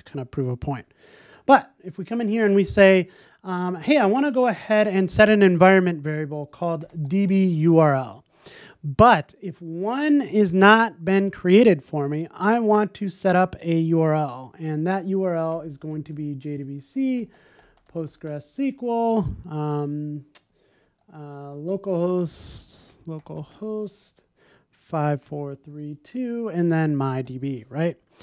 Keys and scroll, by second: 27.8 super+s.